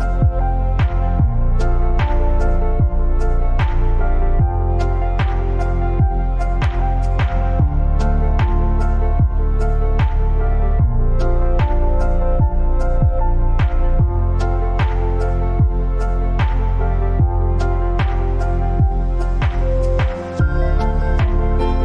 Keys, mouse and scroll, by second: 4.4-15.0 drag, 15.0-17.9 alt+drag, 17.9-20.8 alt+drag, 20.8 alt+scroll down 1, 21.5 space, 21.6 click.